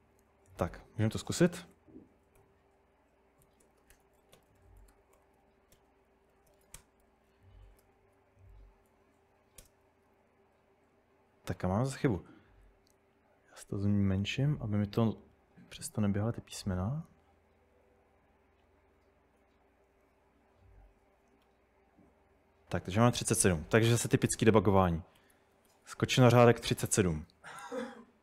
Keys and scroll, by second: 0.4-2.4 typing, 3.5-7.0 typing, 7.3 super+Tab, 7.8 super+Tab, 8.9 Up, 9.6 Return, 24.7-26.2 typing.